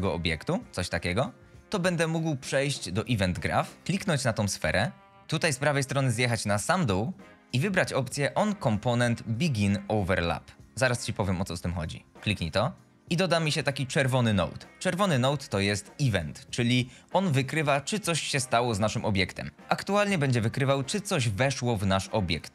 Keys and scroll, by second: 0.0 a.